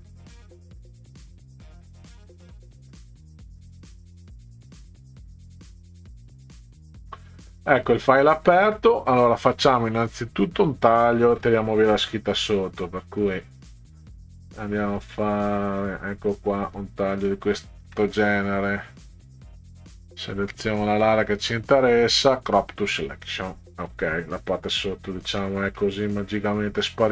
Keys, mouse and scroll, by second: 3.5 click, 10.4 click, 13.0-16.5 drag, 17.8 KP_Enter, 20.0 click, 22.8 click, 25.2 ctrl+scroll up 2, 25.8-27.0 middle drag.